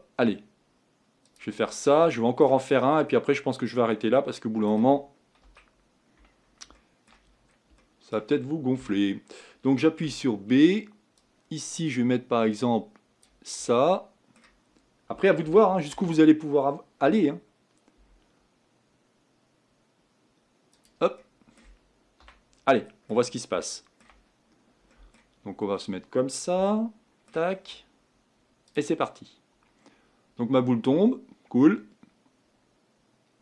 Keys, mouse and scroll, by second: 1.7-2.2 scroll down 4, 2.2 shift+middle click, 2.7-3.3 scroll down 4, 3.3-5.5 middle drag, 5.5 KP_1, 6.3-6.8 scroll down 1, 6.8 shift+middle click, 7.3-7.8 scroll up 3, 7.8-8.8 shift+middle drag, 8.8 a, 13.7-16.8 middle drag, 16.8 shift+d, 21.2-22.3 middle drag, 22.3 a, 22.7 middle click, 23.4-23.7 scroll down 1, 23.7-25.4 shift+middle drag, 25.4-26.7 scroll up 3, 26.7-28.8 shift+middle drag, 28.8-33.4 drag.